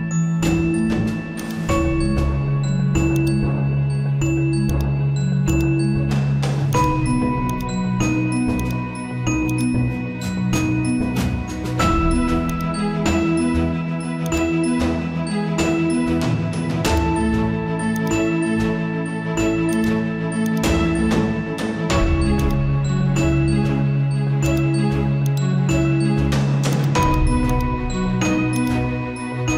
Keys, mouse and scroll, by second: 29.3 z.